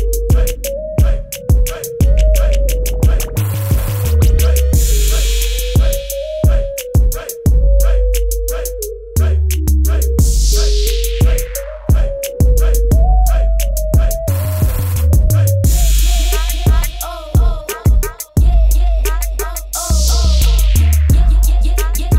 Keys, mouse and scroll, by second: 1.7 click, 5.1 ctrl+d, 6.0 ctrl+KP_0, 8.0 click, 15.6 click.